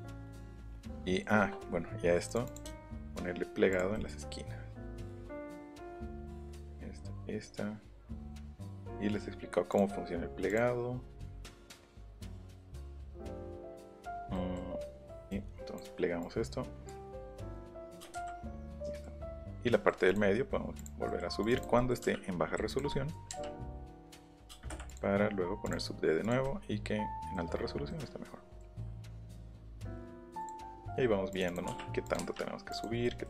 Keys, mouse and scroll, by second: 2.2 click, 2.4 click, 2.6 shift+middle click, 3.7 click, 3.9 scroll down 1, 4.1-4.4 scroll up 1, 5.1 click, 6.5 shift+click, 8.3 shift+click, 9.7 shift+click, 10.4 shift+click, 11.8 shift+click, 12.6 shift+click, 14.0 shift+click, 14.3 middle click, 15.3 click, 16.2 click, 17.2 click, 17.4 middle click, 18.1 Escape, 18.1 space, 20.1 click, 20.8 click, 21.1 middle click, 21.4 click, 21.8 middle click, 22.7 click, 23.3 Up, 24.1 click, 24.5 space, 24.7 Escape, 24.8 click, 25.6 click, 26.2 click, 26.4 middle click, 27.9 middle click, 28.7 click, 29.0 middle click, 30.4 click, 30.8 click, 31.3 click, 31.4 click, 32.0 click, 32.2 Up, 32.7 click, 33.0 scroll up 1.